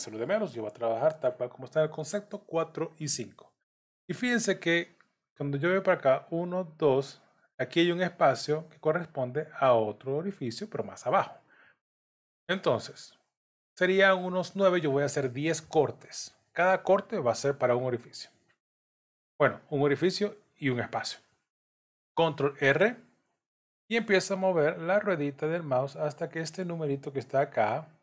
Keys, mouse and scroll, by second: 21.9 ctrl+r.